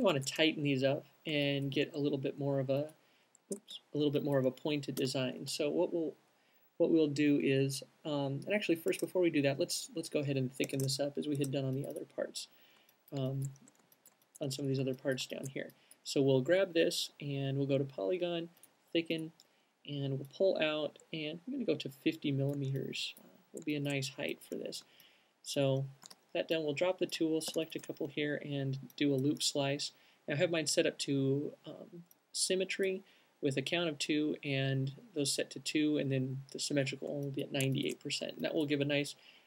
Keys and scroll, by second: 3.8 alt+shift+super+z, 5.7 space, 9.2 shift+space, 10.8 space, 26.3 alt+shift+q, 26.6 c.